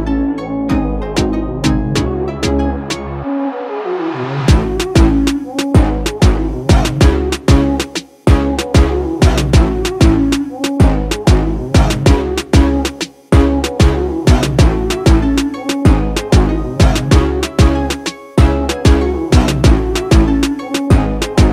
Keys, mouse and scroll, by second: 1.6 click, 4.2 scroll up 1, 4.8-5.5 scroll up 3, 5.5-8.0 middle drag, 8.0 click, 12.7 1, 15.0 1, 16.3-19.6 middle drag, 19.6-21.5 drag.